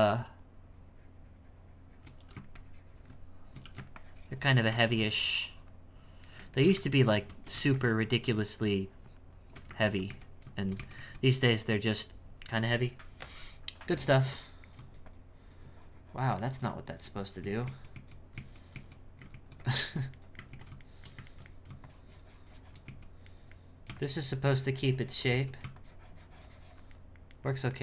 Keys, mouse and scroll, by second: 0.1-2.2 shift+drag, 2.2 e, 2.6-3.6 shift+drag, 3.6 e, 4.0-6.3 shift+drag, 6.3-8.1 shift+middle drag, 8.1-9.8 shift+drag, 9.8 ctrl+z, 10.9 z, 12.9 z, 14.1 z, 14.4 middle click, 15.0-16.4 shift+drag, 16.4 middle click, 17.0 ctrl+z, 17.4 ctrl+z, 17.9 ctrl+z, 18.7 ctrl+z, 19.3 ctrl+shift+z, 19.9 shift+middle click, 20.5 ctrl+z, 20.8-21.8 shift+middle drag, 21.8-22.9 shift+drag, 23.0 z, 23.3 middle click, 24.0-25.3 shift+drag, 25.3 z, 25.8-27.0 shift+drag, 27.0-27.8 shift+middle drag.